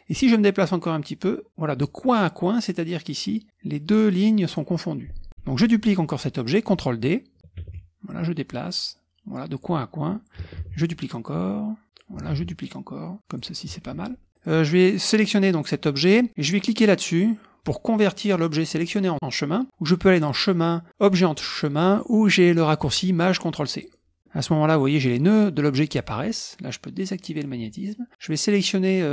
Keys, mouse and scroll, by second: 7.6 ctrl+d, 8.1-9.9 drag, 10.6 ctrl+d, 11.2 click, 12.3 ctrl+d, 12.6-13.8 drag, 14.3 click, 20.2 click, 23.8 click, 24.1-26.2 scroll up 1, 27.2 click, 28.1-29.1 drag.